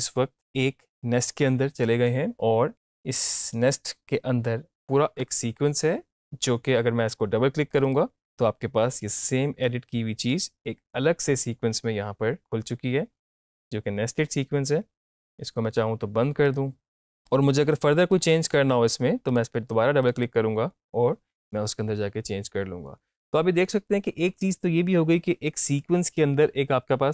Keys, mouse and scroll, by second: 2.7-6.6 drag, 7.7-16.4 drag.